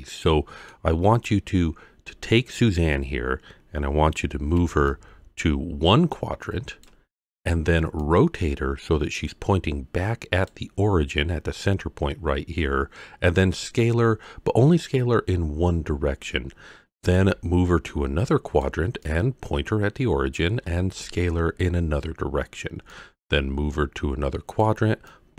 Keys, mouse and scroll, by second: 1.2-1.5 scroll up 2, 4.6 d, 4.9-6.8 drag, 6.8-8.0 d, 8.0-10.5 drag, 10.7-13.1 d, 17.0 d, 17.1-18.6 drag, 18.6-19.0 d, 19.0-20.4 drag, 20.3 d, 20.5 d, 21.3 d, 22.7 d, 22.9-24.6 drag, 24.6 d, 24.7-25.0 d, 25.1-25.3 drag.